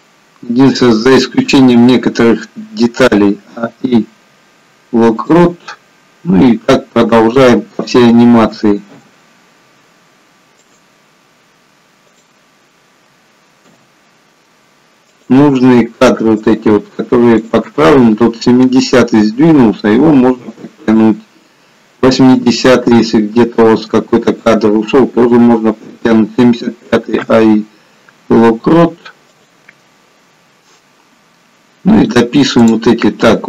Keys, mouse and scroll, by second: 0.1-0.6 scroll down 2, 1.8 scroll down 1, 2.1 click, 3.2 a, 3.5 i, 7.5 click, 8.5 a, 8.9 i, 12.3 click, 13.1 a, 13.7 a, 13.7 i, 16.6 click, 17.6 click, 19.7 g, 22.4 click, 22.8 g, 26.8 a, 27.2 i, 30.4-32.3 scroll down 5, 32.3 click, 32.3-32.7 scroll down 3, 32.7 click.